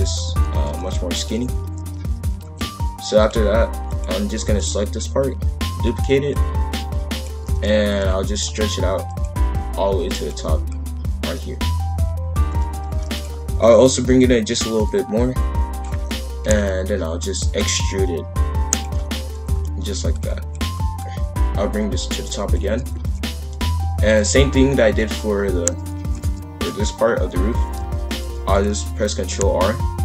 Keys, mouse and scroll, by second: 0.5 shift+f, 3.8 click, 4.5 shift+d, 6.3 click, 7.5 shift+f, 9.1 click, 12.6 shift+f, 13.6 click, 14.1 click, 14.8 click, 16.4 ctrl+l, 17.4 e, 17.9 click, 19.0 shift+f, 20.5 click, 22.7 shift+f, 26.0 shift+f, 26.6 click, 27.6 shift+f, 28.8 ctrl+r.